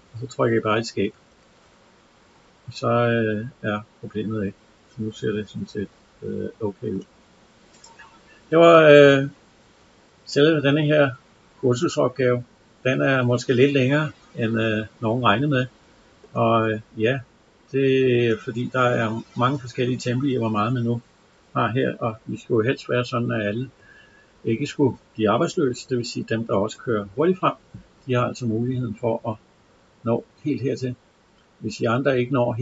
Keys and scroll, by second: 0.8 Escape.